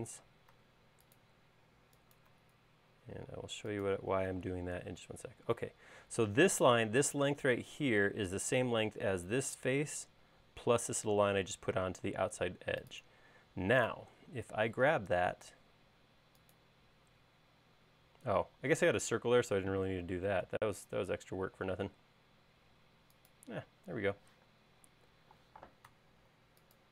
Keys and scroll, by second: 0.6 Left, 4.4 space, 14.9 m, 24.4 q, 25.9 Left, 26.3 Right.